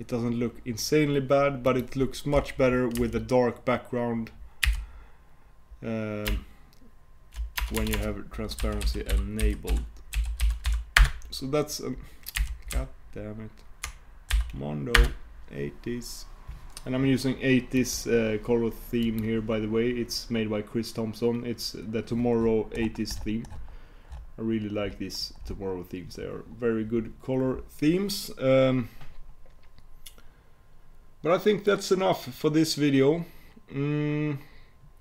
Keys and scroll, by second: 15.4 shift+super+w.